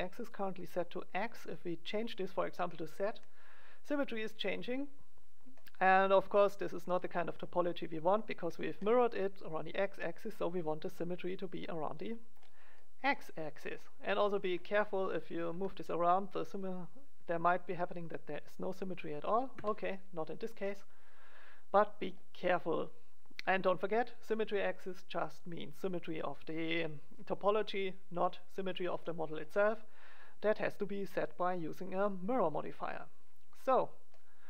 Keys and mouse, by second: 0.2-2.6 drag, 0.8 middle click, 2.6 middle click, 7.6-9.4 middle drag, 11.2-13.6 drag, 13.6 middle click, 14.9 g, 20.2-22.0 middle drag, 28.6 middle click, 32.5-34.4 drag.